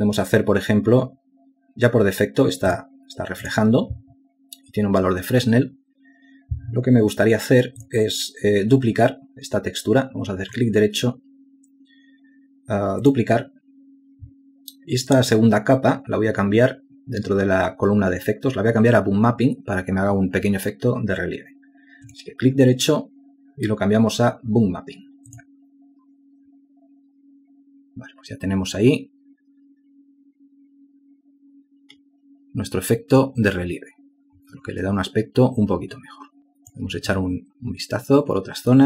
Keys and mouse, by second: 37.4 ctrl+alt+click.